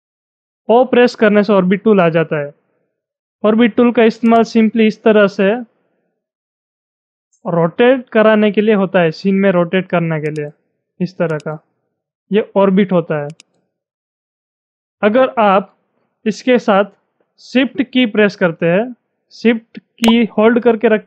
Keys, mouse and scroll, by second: 4.2-17.8 drag, 19.7 shift+Num_Lock, 19.7-21.0 drag.